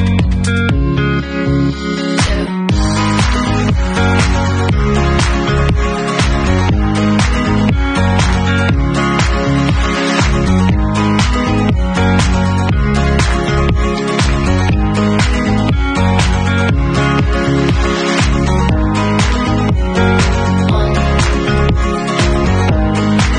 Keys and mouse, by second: 1.5 middle click, 1.8 click, 2.6-4.2 middle drag, 4.2-19.2 drag, 17.6 ctrl+s, 19.2-20.3 middle drag, 20.3 click, 20.7 middle click, 21.0-23.3 drag.